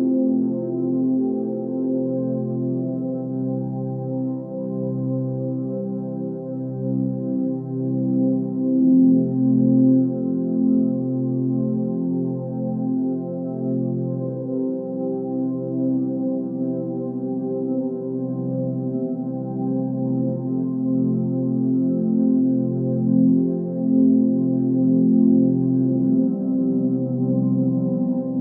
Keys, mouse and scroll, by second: 0.0-0.5 drag, 0.9-2.2 middle drag, 2.2 click, 3.1-5.3 middle drag, 5.3-5.7 scroll up 2, 5.7-8.7 middle drag, 12.1 click, 12.5 Tab, 12.7-14.6 middle drag, 14.6 Tab, 14.7-15.7 middle drag, 16.4-17.0 drag, 17.8 click, 18.7 middle click, 19.3 click, 20.0 drag, 20.2-21.0 middle drag, 21.0-22.0 drag, 22.3 click, 22.5-23.3 middle drag, 23.3 ctrl+s, 23.7-24.1 scroll down 5, 24.1-26.4 middle drag, 26.4-26.8 scroll up 2, 26.8-27.3 middle drag.